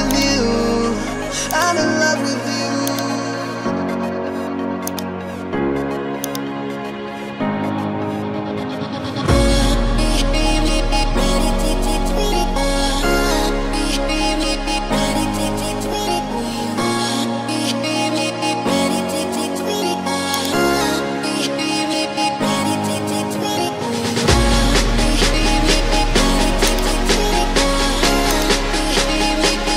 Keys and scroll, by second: 25.1 ctrl+e.